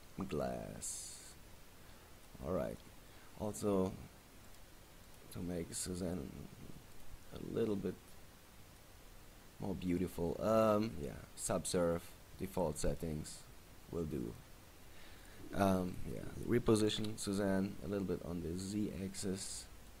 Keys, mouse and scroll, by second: 1.8-2.3 scroll up 4, 2.4 middle click, 4.6 click, 5.2 click, 8.7 scroll up 1, 8.9 middle click, 10.7-11.2 scroll up 2, 11.4-12.0 scroll down 1, 12.0 scroll down 1, 13.0 middle click, 13.6-14.3 scroll down 4, 14.0-14.5 scroll up 3, 14.3 middle click, 15.4 right click, 16.0 right click, 16.8 g, 19.8 click.